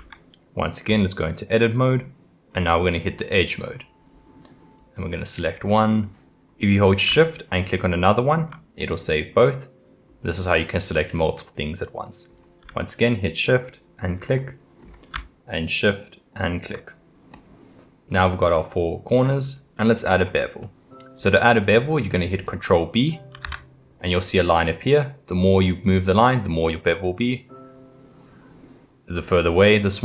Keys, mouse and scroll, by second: 0.0 Tab, 3.7 click, 5.7-8.1 middle drag, 8.1 shift+click, 8.8-13.6 middle drag, 13.6 shift+click, 14.4-16.4 middle drag, 16.4 shift+click, 17.3-20.1 middle drag, 20.1-20.6 scroll up 1, 20.6-21.7 middle drag, 21.7-22.1 scroll down 1, 22.1-23.4 middle drag, 23.4 ctrl+b.